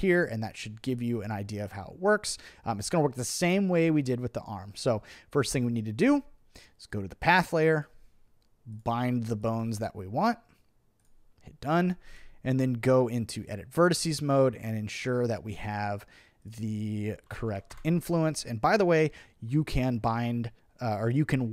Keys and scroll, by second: 6.1 Return, 12.5 Return, 17.1-18.0 typing.